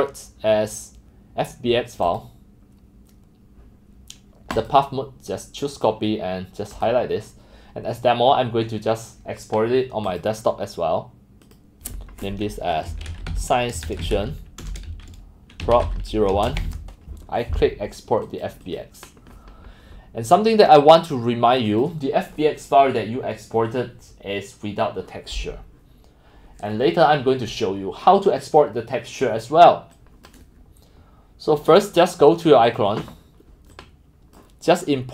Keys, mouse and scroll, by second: 2.1 click, 2.2 click, 4.6 click, 5.7 click, 6.8 click, 7.4 drag, 10.1 click, 11.4 click, 12.9-35.1 typing, 18.2 click, 18.7 click, 21.0 click, 21.7 click, 25.6 click, 30.0 click, 30.1 middle drag, 30.1 click, 30.3 middle click, 30.3-32.7 drag, 33.3 click, 33.7 middle click, 33.9 middle drag, 34.2 click, 34.6 click.